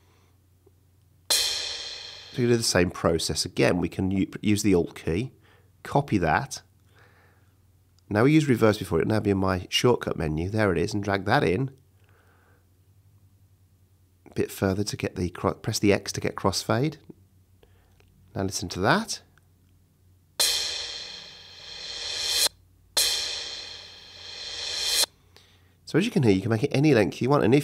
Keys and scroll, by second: 0.4 space, 1.0 space, 2.6 space, 13.4 x, 16.2 x, 20.1 space, 25.4 space.